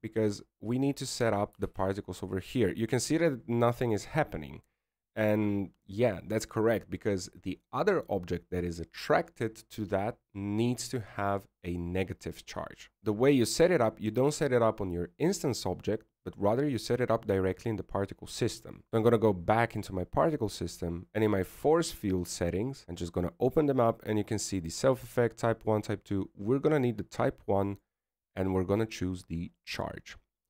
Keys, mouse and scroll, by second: 4.9 alt+a, 4.9 right click, 5.3 click, 16.4 right click, 18.8 right click, 20.0 click, 21.1-22.7 scroll down 10.